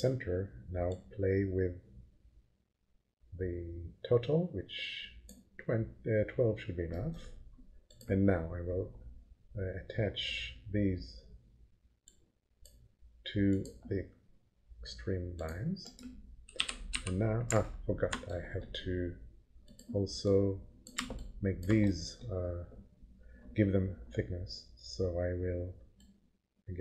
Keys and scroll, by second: 16.6 p, 16.9 f.